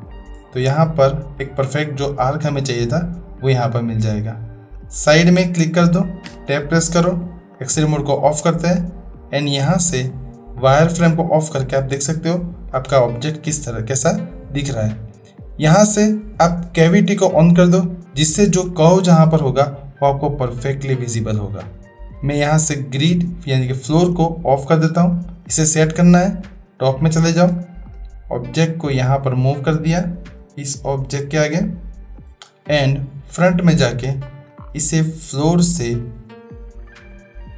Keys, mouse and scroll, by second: 6.2 Tab, 9.6-11.8 drag, 12.2 middle click, 15.5-18.2 drag, 22.4-23.6 drag, 27.6-27.9 shift+middle drag, 28.5-32.2 drag, 33.3 click, 34.2 shift+middle drag, 35.8-37.5 drag.